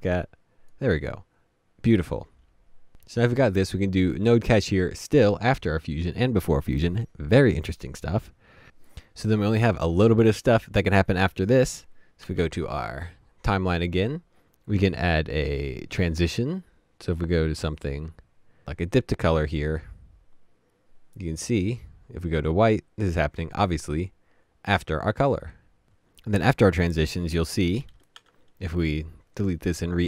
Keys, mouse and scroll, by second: 28.1 Delete.